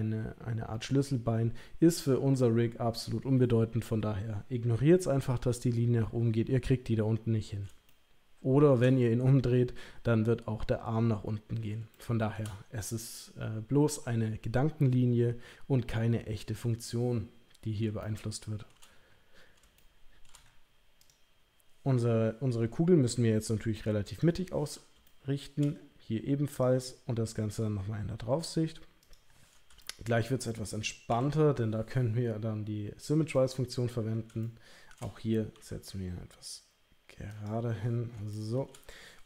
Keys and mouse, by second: 7.9 shift+middle click, 12.0 shift+middle click, 18.0 shift+middle click, 21.0 click, 23.3 g, 25.0 shift+middle click, 26.5 click, 27.5 g, 29.8 shift+middle click, 31.1 e, 35.5 g, 38.3 shift+middle click.